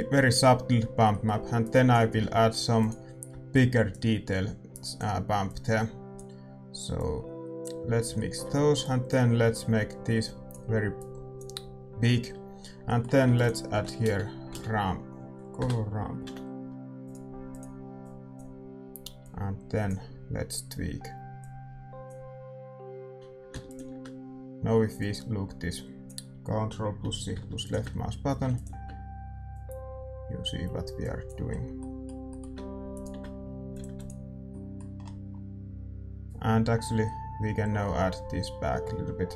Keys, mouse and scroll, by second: 0.0 ctrl+s, 6.1-8.6 drag, 8.6-12.8 middle drag, 8.9-12.8 drag, 17.7-21.3 drag, 21.4-38.3 drag, 35.7 ctrl+s, 35.7-38.0 middle drag.